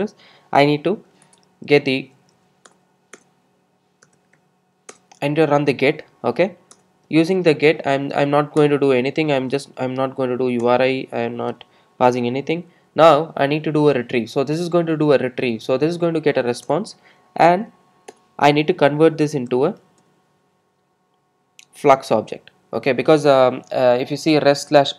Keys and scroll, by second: 2.7 Return, 3.5 Return, 16.8 Return.